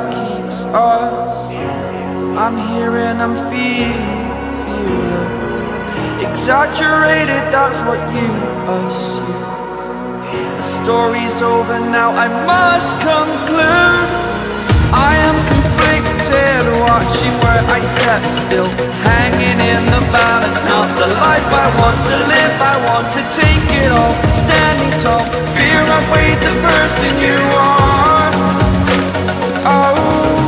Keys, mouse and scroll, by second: 18.5 click, 28.6-29.3 scroll down 1, 29.3 click.